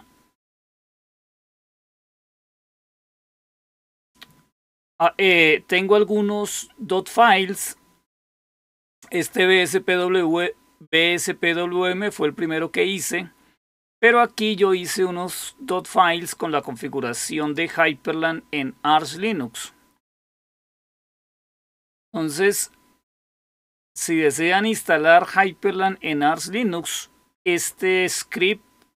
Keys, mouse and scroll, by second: 1.4-2.2 scroll down 1, 3.2 click, 8.2 click, 17.3 click, 22.6-23.6 scroll down 2, 23.6-24.2 scroll down 1, 25.7-27.2 scroll down 2.